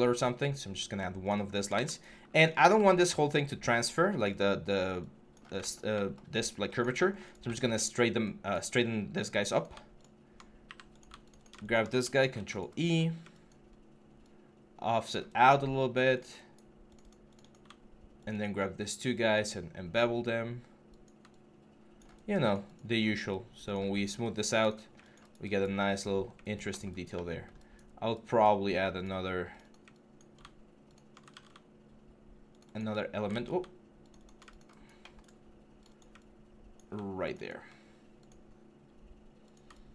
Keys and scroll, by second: 12.0 ctrl+e, 22.8 3, 31.1 ctrl+z, 33.1 ctrl+z.